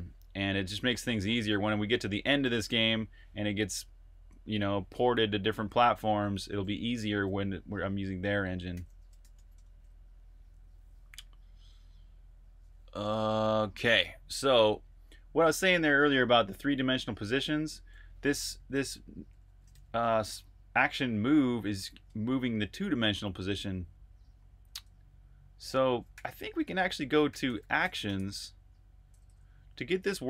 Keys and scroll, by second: 6.8 Escape, 7.0-9.7 typing, 15.6-19.6 typing, 25.7-30.2 typing.